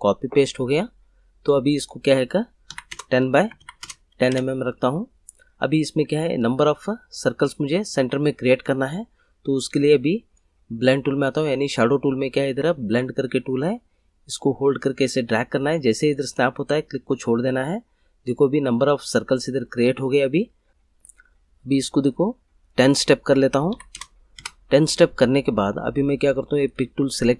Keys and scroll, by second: 2.4-4.2 typing, 20.7 ctrl+z, 23.4-24.4 typing.